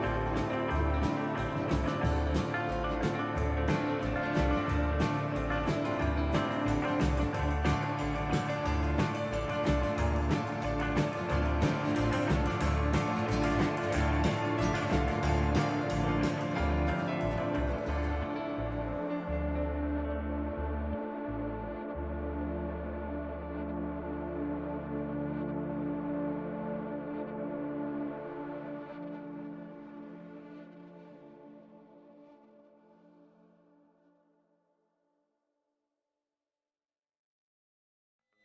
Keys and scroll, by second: 24.5 a, 25.8 u, 35.5 n.